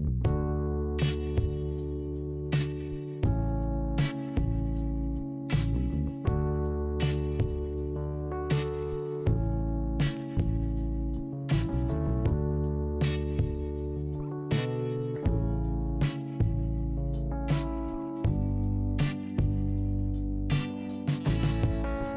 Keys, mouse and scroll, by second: 1.2-1.7 scroll down 1, 2.4-2.8 scroll up 2, 2.7 click, 2.9 click, 2.9 click, 3.3 scroll up 1, 5.1-6.3 scroll up 1, 6.3 scroll up 1, 6.8 click, 6.9 click, 9.2 click, 9.3 click, 9.9-10.5 scroll up 1, 10.6 click, 12.8 scroll up 1, 13.4 click, 16.3-17.4 scroll down 2, 17.4 click, 17.6 click, 18.1 click, 18.2 click, 19.0 click, 19.1 click, 19.5 scroll down 1, 20.6 scroll up 2, 21.7 click.